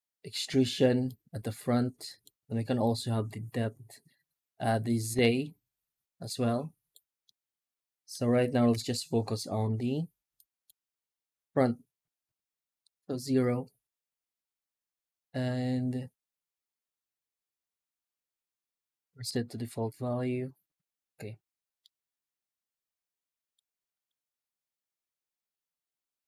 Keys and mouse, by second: 7.1-8.0 middle drag, 8.6 F9, 21.7-23.4 middle drag, 23.8 middle click, 24.3 F9.